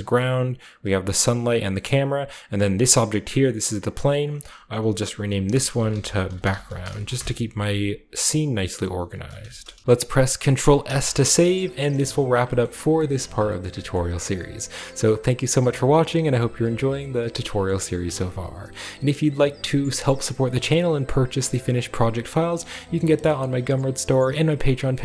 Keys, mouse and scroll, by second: 0.6 click, 1.4 click, 2.8 click, 3.8 click, 4.0 click, 5.4-7.6 typing, 8.2 click, 8.4 click, 9.2-11.3 typing.